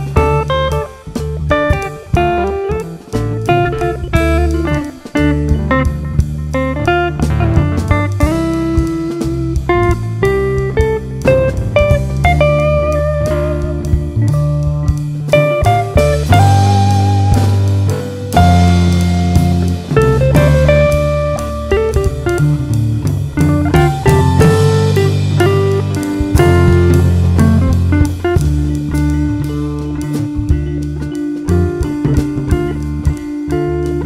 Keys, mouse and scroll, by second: 0.2 click, 0.9 `, 2.1 click, 2.4 KP_Decimal, 2.6 scroll down 1, 3.0 `, 3.7 click, 3.8 scroll down 1, 4.1 1, 4.5 click, 5.1 shift+click, 5.6 j, 5.9 click, 6.7 g, 7.5 scroll up 1, 7.7 `, 8.7 ctrl+r, 9.3 scroll down 1, 9.5 ctrl+r, 11.1 scroll up 1, 11.1 alt+a, 11.8 k, 13.3 scroll down 1, 13.5-14.1 scroll up 1, 14.1 click, 14.4 shift+click, 15.1 g, 16.0 click, 16.1 shift+click, 17.7-18.1 scroll down 1, 18.7 Tab, 18.9 `, 19.4 click, 20.1 KP_Decimal, 20.5 scroll down 1, 21.0 `, 21.5 scroll down 1, 22.0 alt+a, 22.2 ctrl+r, 23.1 scroll up 1, 23.7 `, 24.3 click, 24.4 shift+click, 24.9 j, 25.2 2, 25.5 space, 27.7 space, 28.1 1, 28.4 click, 28.5 shift+click, 29.2 alt+m, 29.7 click, 30.1 shift+click, 31.3 alt+a, 31.7 click, 31.9 ctrl+x, 32.1-32.5 scroll down 1, 32.5 `, 33.1 Tab.